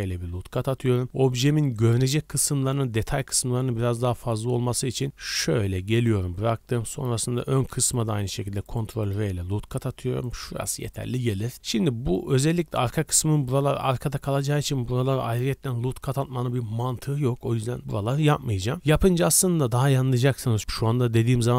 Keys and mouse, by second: 8.2 ctrl+r.